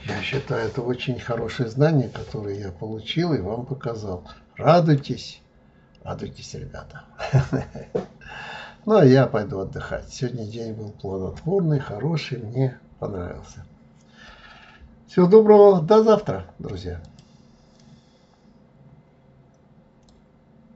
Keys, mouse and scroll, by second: 0.9-1.4 scroll down 2, 1.4-2.5 scroll up 1, 2.5-5.6 middle drag, 7.8-8.2 scroll down 3, 8.2 scroll up 4, 9.0-9.3 scroll down 2, 9.3 scroll up 2.